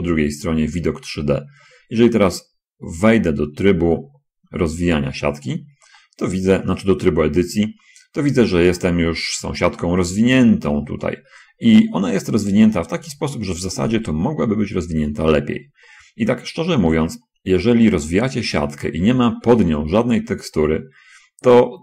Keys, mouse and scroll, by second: 0.6 middle click, 1.3 middle click, 1.3-1.6 scroll up 1, 4.0 Tab, 6.4 middle click, 7.8-8.9 middle drag, 9.2-10.3 middle drag, 12.2 shift+middle click, 13.9 shift+middle click, 14.9 shift+scroll down 1, 15.3 shift+middle click, 18.3 shift+middle click.